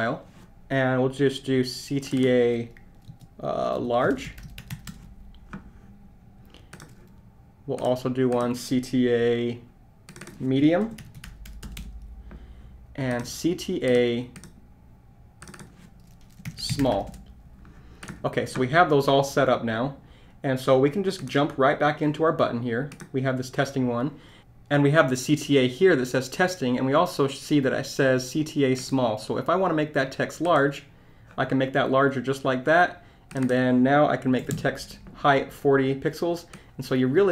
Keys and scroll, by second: 3.9-4.7 typing, 10.6-11.5 typing, 16.2-17.1 typing.